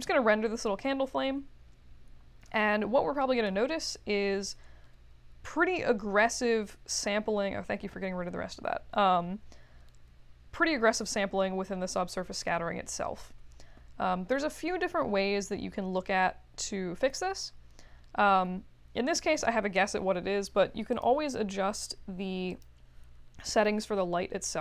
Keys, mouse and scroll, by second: 20.9 click, 22.5 click.